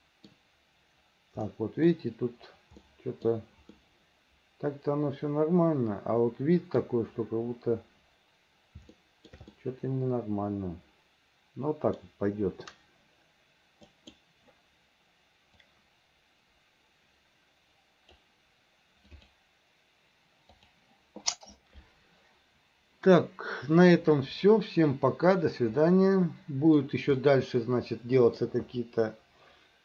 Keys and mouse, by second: 1.6 middle click, 3.0 middle click, 3.9-6.9 middle drag, 9.1 shift+middle click, 9.6-12.1 middle drag, 24.3-25.5 middle drag, 26.0 middle click, 27.3-28.5 middle drag.